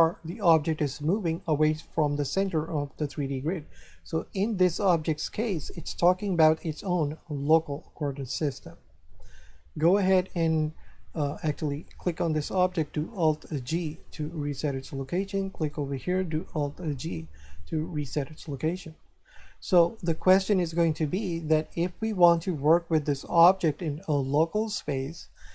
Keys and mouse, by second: 11.8 right click, 13.5 alt+g, 15.5 right click, 17.1 alt+g, 22.2 right click.